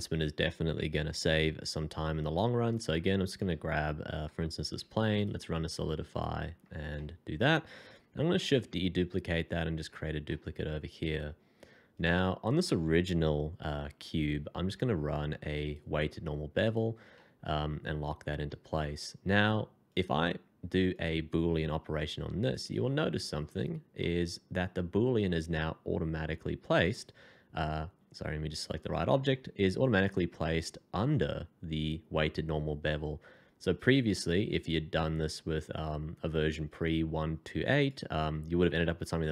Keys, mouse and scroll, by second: 2.7 s, 3.7 Escape, 4.8 f, 6.4 scroll down 1, 6.9 middle click, 8.3 shift+d, 10.2 middle click, 11.4 scroll up 1, 14.3 f, 17.1 middle click, 20.9 shift+click, 22.9 f, 24.0 middle click, 38.8 middle click.